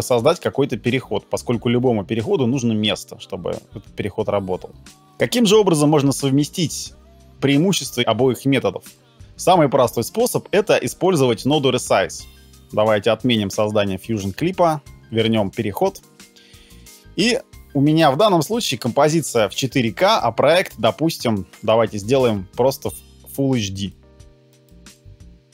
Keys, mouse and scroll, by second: 12.4 ctrl+z, 14.5 ctrl+z.